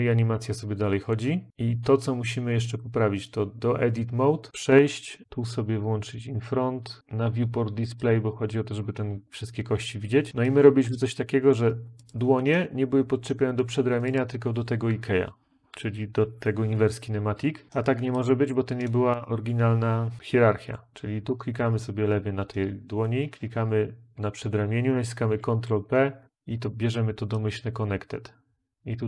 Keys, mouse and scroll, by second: 25.1 ctrl+p, 26.1 Return.